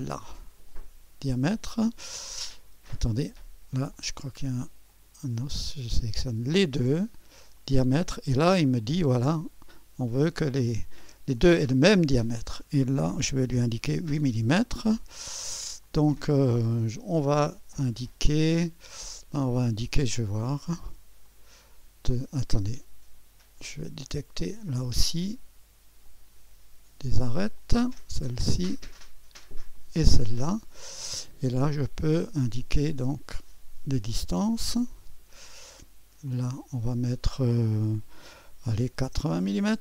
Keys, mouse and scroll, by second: 0.0-1.6 drag, 3.2 click, 4.0 click, 4.9 click, 6.1 right click, 6.9 click, 7.6 right click, 8.5 click, 11.4-12.4 drag, 13.6-17.8 typing, 15.8-17.8 drag, 21.2-22.3 drag, 22.6-23.7 drag, 24.0-25.1 drag, 26.0-27.3 drag, 27.6-28.7 drag, 29.7 click, 30.9 right click, 33.3-34.4 drag, 35.0-36.0 drag, 36.3-37.3 drag, 38.6-39.5 typing.